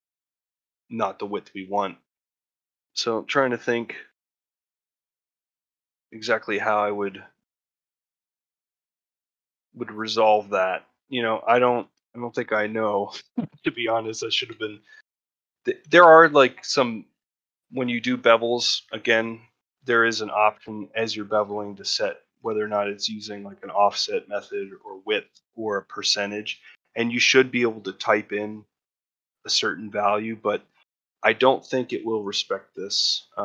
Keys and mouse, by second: 11.4 shift+middle click, 11.9 ctrl+middle click, 13.4 ctrl+middle click, 13.7 shift+middle click, 15.0 ctrl+middle click, 15.4 shift+middle click, 15.8 ctrl+middle click, 17.1 shift+middle click, 20.9 shift+middle click, 21.4 ctrl+middle click, 21.7 shift+middle click, 31.5 ctrl+middle click, 31.9 shift+middle click.